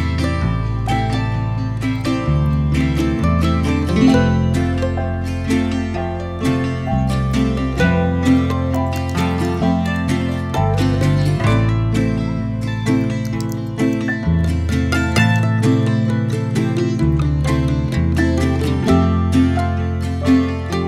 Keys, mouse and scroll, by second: 0.8-3.4 middle drag, 3.4 click, 3.8 middle click, 4.3 click, 4.8-5.4 middle drag, 5.4 m, 6.8 click, 7.9 click, 8.1-11.1 drag, 12.0 click, 18.1 scroll down 2, 18.4-19.1 middle drag, 19.1-19.5 scroll up 1, 19.5 click, 19.9-20.8 middle drag.